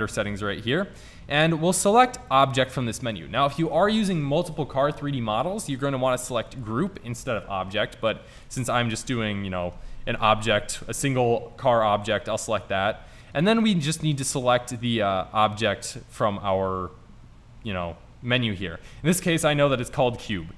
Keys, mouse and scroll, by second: 2.5 click, 6.7 click.